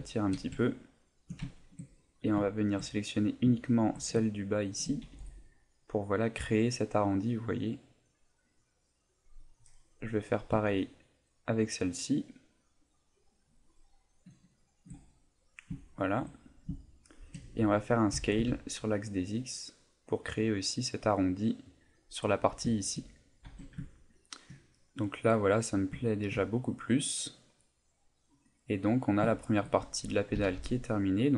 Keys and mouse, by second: 0.1 shift+middle click, 0.6 ctrl+middle click, 1.0 ctrl+middle click, 1.2 shift+middle click, 1.5 shift+middle click, 1.9 middle click, 2.5 shift+middle click, 3.3 right click, 3.6 shift+right click, 4.4 right click, 5.0 g, 9.5 click, 10.3 right click, 11.0 shift+right click, 11.4 right click, 12.1-15.1 shift+right click, 15.1 middle click, 15.8 shift+middle click, 16.3 middle click, 16.8 shift+middle click, 18.1 s, 21.7 click, 22.7 shift+middle click, 23.1 middle click, 23.4 Tab, 23.9 ctrl+middle click, 24.5 ctrl+middle click, 26.0 ctrl+middle click, 26.4 middle click, 29.3 shift+middle click, 30.3 s.